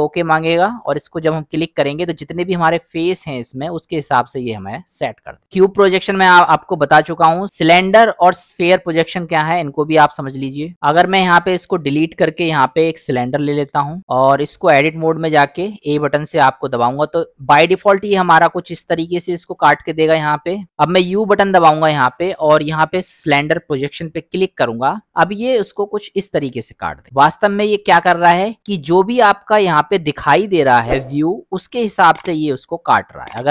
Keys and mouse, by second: 2.3 middle click, 3.2 middle click, 10.7-11.2 drag, 11.4 drag, 11.7 click, 12.6 Delete, 13.6 shift+a, 14.7 click, 18.4 middle click, 21.0 u, 29.0-31.6 middle drag.